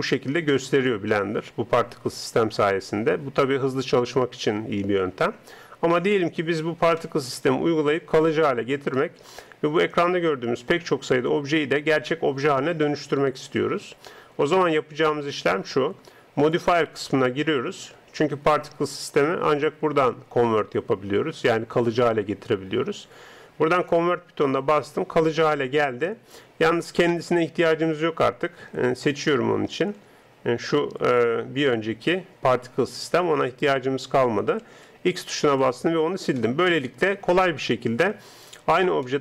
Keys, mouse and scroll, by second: 0.3-1.5 middle drag, 2.9-3.9 middle drag, 5.1 middle click, 7.0-16.5 middle drag, 16.5-28.1 drag, 29.1 right click, 30.1 g, 34.7 x, 36.4-38.3 middle drag, 38.3 right click, 39.1-39.2 middle drag.